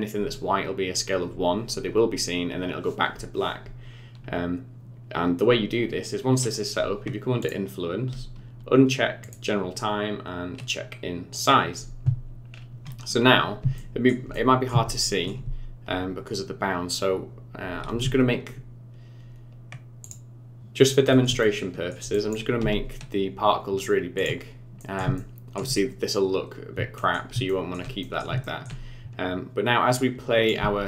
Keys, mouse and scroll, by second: 3.8-4.8 scroll down 9, 4.8-7.3 scroll up 5, 7.4 click, 9.2 click, 11.3 click, 12.4-13.2 scroll up 5, 13.2-13.6 scroll up 2, 13.7 shift+middle click, 14.3 middle click, 14.9 shift+middle click, 16.2-16.6 scroll down 4, 16.6 scroll up 2, 17.6-18.0 scroll down 2, 20.0 click, 21.1 middle click, 21.4 shift+middle click, 22.1 click, 22.6 s, 24.8 middle click, 25.2 shift+middle click, 26.4 scroll up 2, 27.0 middle click, 27.5 shift+middle click, 28.0 middle click, 28.4 shift+middle click, 30.0 click, 30.6 space.